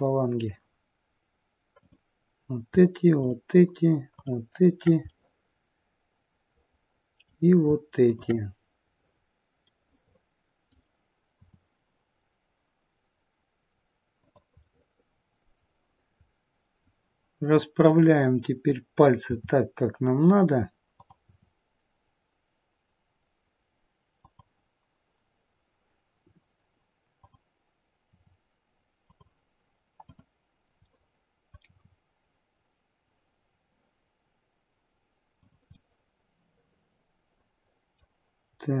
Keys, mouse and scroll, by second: 1.8 click, 3.2 shift+click, 5.1 middle click, 8.0 shift+click, 9.1-9.7 scroll down 2, 9.7 middle click, 11.5 r, 14.7 middle click, 16.3 middle click, 17.8 click, 19.3 r, 21.0 click, 21.6 r, 27.2 click, 28.1 r, 30.0 click, 30.8 middle click, 31.6 r, 35.6 middle click, 38.5-38.8 scroll up 3.